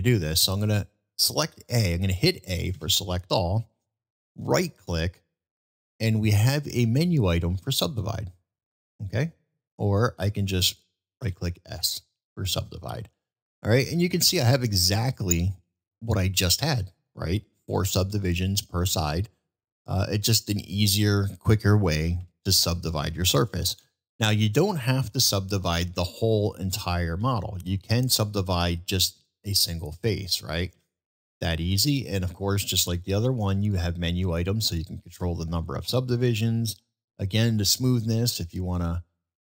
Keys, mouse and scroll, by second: 10.2 ctrl+z, 13.0-13.6 middle drag, 14.3-14.7 middle drag, 15.7-17.6 middle drag, 18.0-18.4 middle drag, 18.6-18.9 middle drag, 19.5-20.5 middle drag, 22.2 ctrl+z, 23.0 ctrl+z, 23.5-23.9 middle drag, 24.6-25.0 middle drag, 27.8-28.2 middle drag, 28.6 middle click, 33.8-36.0 drag, 37.3-39.4 drag.